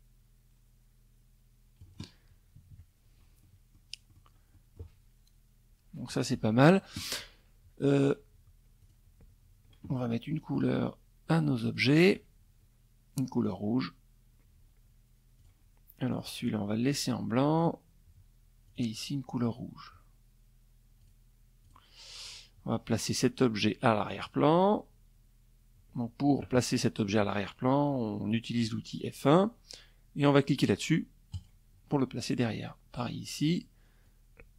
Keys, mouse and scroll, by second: 1.1 KP_Subtract, 1.9 middle click, 1.9-2.5 scroll up 1, 2.6 middle click, 2.6-3.5 scroll up 2, 3.1 middle click, 7.3 click, 9.0 shift+click, 10.3 shift+click, 12.0 click, 13.9 click, 14.6 click, 16.1 click, 17.2 click, 19.6 click, 20.2 click, 20.8 click, 22.7 click, 29.9 click, 31.1 click, 32.6 click, 33.4 ctrl+z.